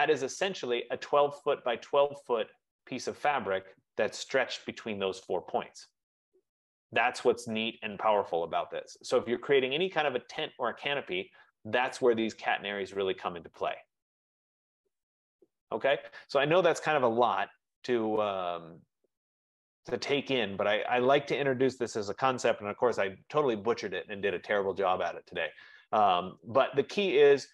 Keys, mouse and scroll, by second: 0.0 click, 0.7-1.5 typing, 0.8 middle click, 1.2 middle click, 1.5 click, 5.3 scroll, 7.4 right click, 9.5 right click, 11.7-12.1 scroll down 3, 12.3 middle click, 16.0 right click, 19.9 right click, 21.2 F15.